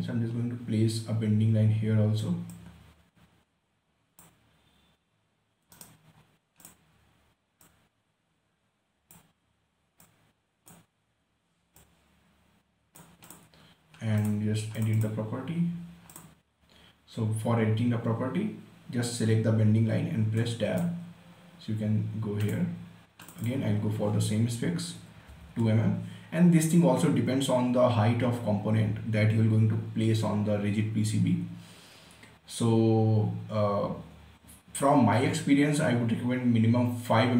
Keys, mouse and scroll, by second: 0.0 click, 0.6 scroll up 1, 2.9-6.1 drag, 6.1 right click, 6.5 scroll up 1, 6.9-13.6 drag, 19.4-20.7 drag, 20.7 Tab, 22.8 click, 25.4-25.7 typing, 27.8 typing.